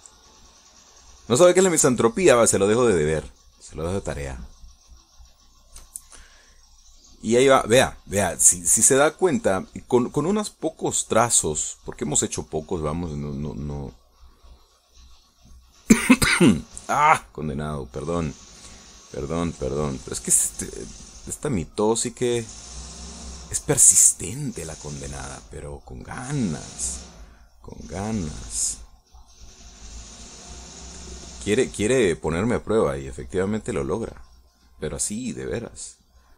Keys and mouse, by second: 0.3-1.9 drag, 2.0 middle click, 2.5-5.5 shift+middle drag, 5.9-6.9 shift+middle drag, 8.5-12.6 drag, 17.8-20.3 drag, 20.5 click, 21.3 click, 22.3-23.4 middle drag, 27.2 click, 27.6-29.7 drag, 29.7 middle click, 30.3-31.9 drag, 32.1-33.9 middle drag, 34.3-35.3 drag, 35.4-36.3 middle drag.